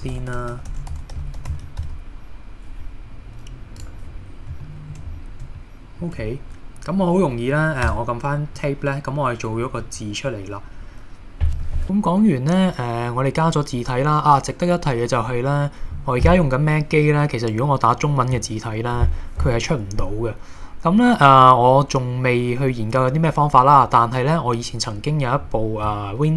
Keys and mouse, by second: 0.0-1.8 typing, 3.8 click, 4.6 shift+middle click, 5.6 shift+middle click, 7.9 Tab, 8.6-9.9 middle drag, 11.8 shift+a.